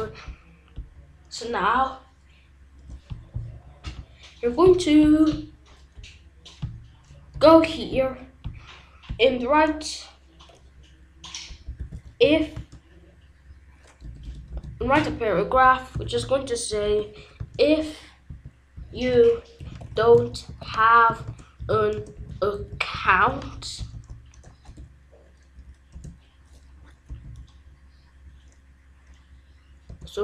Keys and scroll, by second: 7.3 Return, 11.8 i, 12.2 f, 12.5 space, 14.0 BackSpace, 14.8 p, 15.5 Return, 16.7-24.6 typing, 25.9 space, 27.0 BackSpace, 29.8 space.